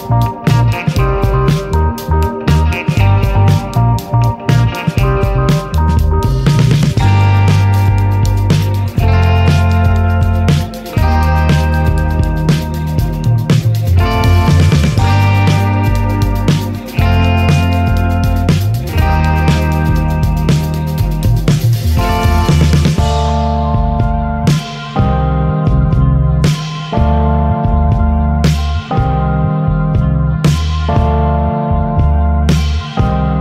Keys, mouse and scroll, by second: 0.1-3.1 drag, 3.8 click, 5.7-8.4 drag, 8.9 click, 11.3-14.5 drag, 15.1 click, 16.6-19.9 drag, 20.3 shift+click, 21.9-24.2 drag, 24.8 right click, 27.1 F1, 29.1 click, 30.1 click, 31.0 click.